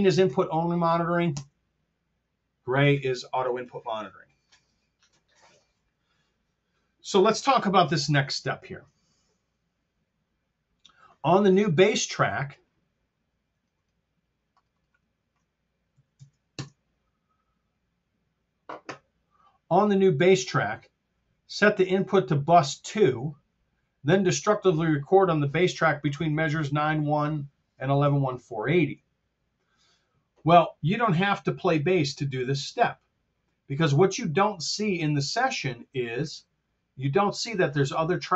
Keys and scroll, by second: 1.2 alt+k, 7.9 super+Tab, 15.8 KP_1, 16.0 KP_5, 16.1 KP_0, 16.4 Home, 20.7 Down, 27.9 super+Tab.